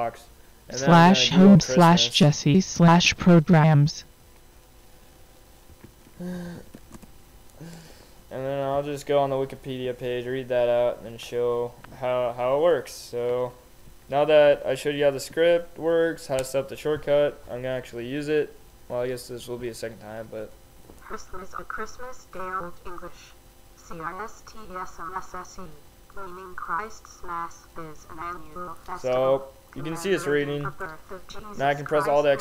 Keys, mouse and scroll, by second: 0.0 Return, 2.5-3.5 typing, 2.6 click, 5.5-7.3 typing, 9.0 click, 13.3-15.5 drag, 20.2 alt+x.